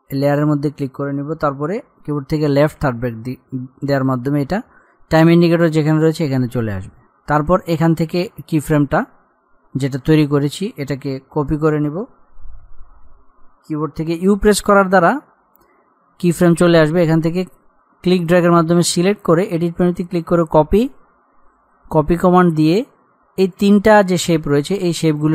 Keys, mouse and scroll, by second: 2.9 [, 7.2-7.9 scroll up 1, 9.1 click, 14.5 u, 17.2-25.1 drag, 25.2 shift+click.